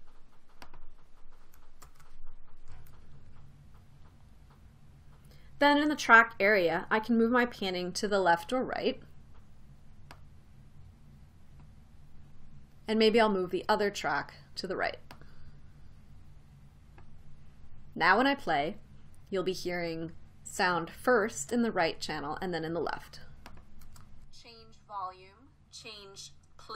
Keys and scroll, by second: 2.5 super+v, 24.5 space.